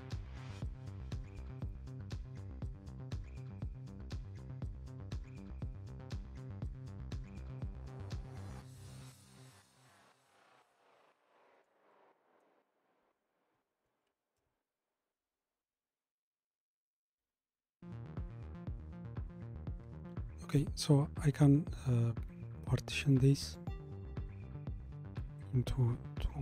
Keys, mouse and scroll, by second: 4.4-7.4 middle drag, 9.4-11.0 scroll up 1, 11.0-14.5 shift+middle drag, 14.5 ctrl+alt+KP_0, 16.9 scroll up 1, 23.6-26.4 drag.